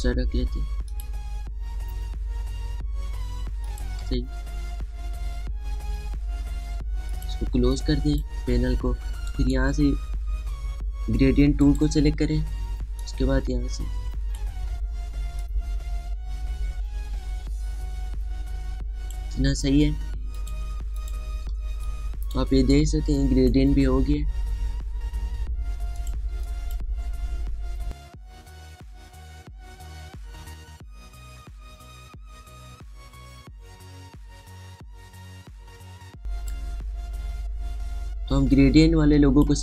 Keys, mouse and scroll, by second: 4.4 click, 4.8 space, 7.9 click, 8.4 space, 8.5 click, 8.9 space, 10.1 right click, 12.4-21.2 drag, 22.3 space, 22.7 click, 22.8 space, 23.5-26.7 drag, 26.8 click, 27.1 space, 27.3 click, 27.7 space, 29.8-35.0 drag, 36.8 space, 36.9 click, 37.2 space, 39.3 click.